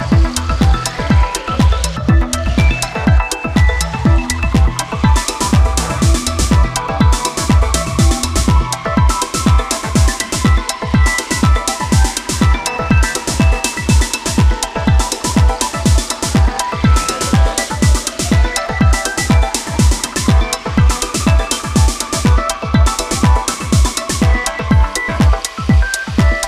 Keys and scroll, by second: 0.1 ctrl+z, 0.5 space, 1.4 space, 3.1 space, 4.2 space, 5.0 space, 6.3 ctrl+space, 8.8 space, 10.3 space, 14.1 space, 16.5 space, 19.1 space, 21.1 ctrl+Return.